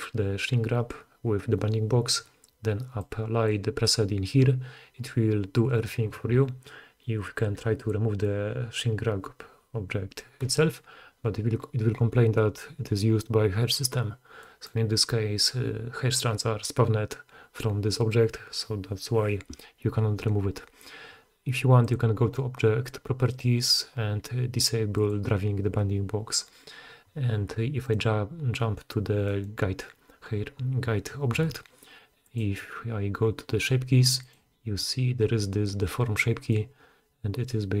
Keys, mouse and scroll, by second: 8.7-23.3 middle drag, 23.3-25.1 drag, 25.1-27.8 middle drag, 27.8 click, 27.9-32.2 middle drag, 32.2 click, 32.4-34.4 middle drag, 34.4-37.8 drag.